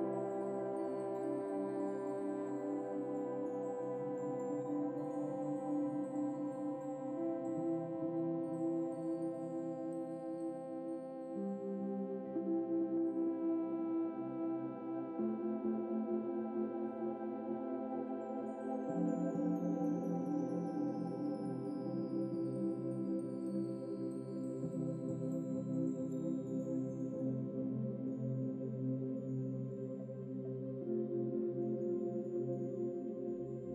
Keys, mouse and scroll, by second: 0.0 ctrl+s, 2.9-3.3 scroll down 2, 3.3 scroll up 2, 3.5-6.4 middle drag, 6.4 click, 6.9 click, 7.4 scroll up 5, 7.7 scroll down 2, 7.9-8.3 shift+middle drag, 8.3 click, 8.7 click, 9.2 shift+click, 10.2 ctrl+j, 11.2-12.2 right drag, 12.2 scroll down 5, 13.3 click, 16.0 Tab, 17.0-17.7 scroll up 15, 17.7 scroll down 4, 18.9 a, 19.7 a, 21.3 u, 23.2 Tab, 23.6 click, 24.4 Tab, 24.7 Tab, 25.4-26.6 drag, 26.6 Tab, 27.1 scroll up 3, 28.6 u, 30.1 Tab, 30.4 click, 31.3 Tab, 32.5 u, 33.4 Tab, 33.5-33.7 scroll down 4.